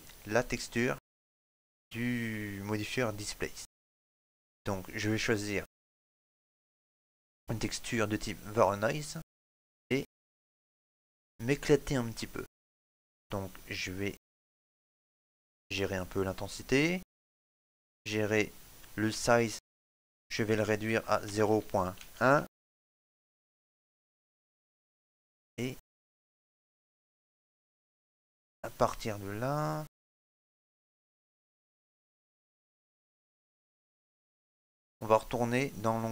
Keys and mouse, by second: 10.1 middle click, 13.4 click, 28.9 click, 28.9 middle click.